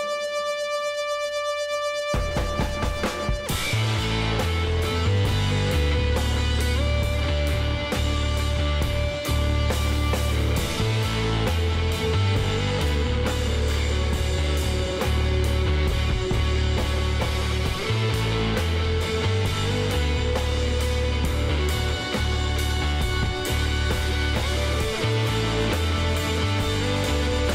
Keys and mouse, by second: 0.0 z, 2.5 s, 5.3 KP_1, 5.8 z, 10.0 click, 10.9 b, 13.3 s, 16.3-18.3 drag, 17.7-19.3 middle drag, 19.5 middle click, 20.0 Tab, 21.0 z, 23.4 a.